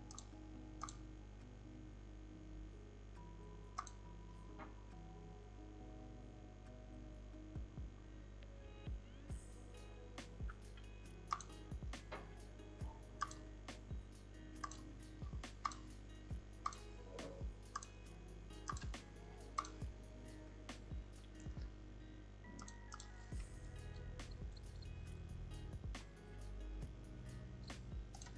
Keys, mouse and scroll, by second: 22.9-25.9 drag.